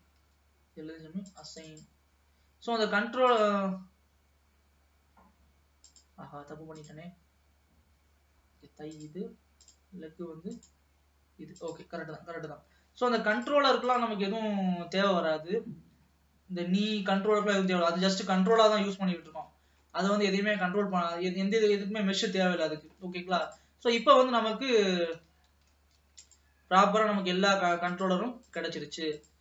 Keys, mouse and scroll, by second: 0.1 l, 1.5-4.0 drag, 6.2 click, 7.1-9.5 drag, 10.6-11.9 drag, 12.1-13.4 scroll down 2, 13.4 click, 14.0 click, 14.4-15.0 scroll down 1, 15.4-16.1 scroll down 4, 16.2-16.9 scroll down 2, 17.7-18.5 scroll down 1, 18.5-19.6 scroll up 2, 19.6 ctrl+s, 20.0-21.0 middle drag, 21.0 scroll down 2, 22.1-23.2 middle drag, 23.2 ctrl+s, 23.7 click, 24.7-25.1 scroll down 2, 25.1 ctrl+s, 25.5 alt+a, 26.0 ctrl+s, 26.3 click, 28.0-29.4 drag.